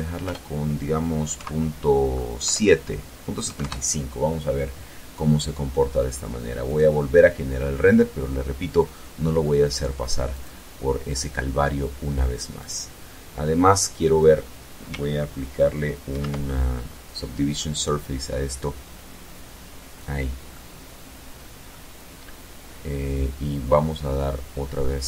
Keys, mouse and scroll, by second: 0.1 KP_Decimal, 1.2 KP_7, 2.2 KP_5, 2.4 KP_Enter, 4.0-5.1 middle drag, 5.4 right click, 6.5-8.2 middle drag, 9.1 click, 11.3 click, 14.8 ctrl+2, 19.2-20.7 middle drag, 24.5 click.